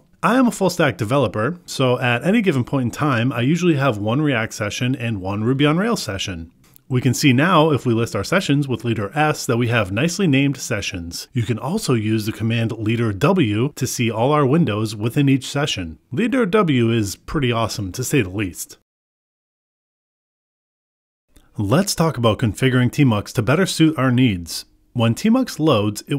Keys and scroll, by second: 1.1 Return, 7.6 ctrl+b, 12.9 Return, 13.8 ctrl+b, 21.8 Return.